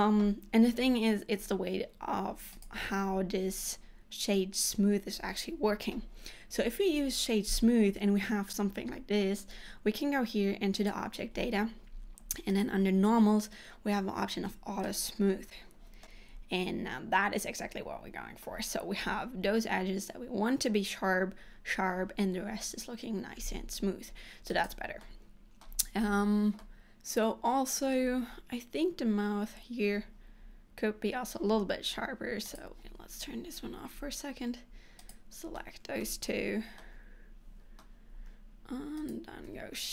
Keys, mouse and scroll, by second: 2.7 click, 15.9 click, 16.2 middle click, 24.7 click, 25.1 middle click, 26.8 middle click, 32.7 click, 33.5 Tab, 34.3 scroll up 1, 35.1 click, 35.6 middle click, 36.9 middle click, 39.1 shift+click.